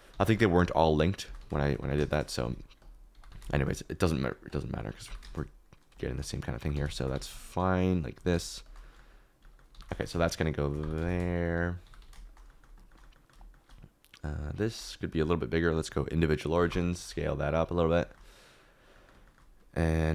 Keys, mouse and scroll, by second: 0.0-3.2 typing, 5.0 g, 5.2 shift+z, 6.5-8.3 typing, 9.7-11.9 typing, 12.7 shift+middle click, 13.3 shift+middle click, 16.6 click, 17.1 s, 18.1 shift+middle click, 19.2 shift+middle click.